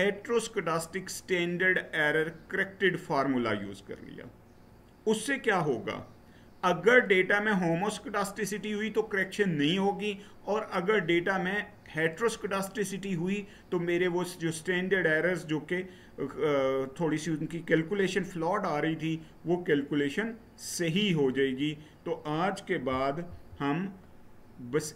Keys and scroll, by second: 23.0 Right.